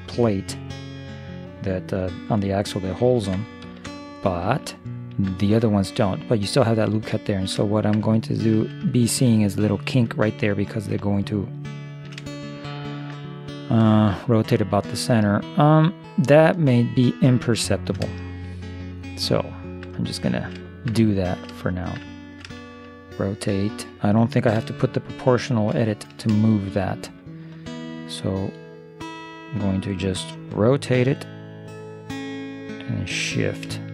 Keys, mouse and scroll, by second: 3.7 ctrl+KP_3, 4.8 middle click, 7.2-8.6 middle drag, 8.9-10.7 middle drag, 11.2-13.4 middle drag, 13.5 middle click, 14.1 middle click, 16.7-22.7 middle drag, 25.9-28.4 middle drag, 31.0 r.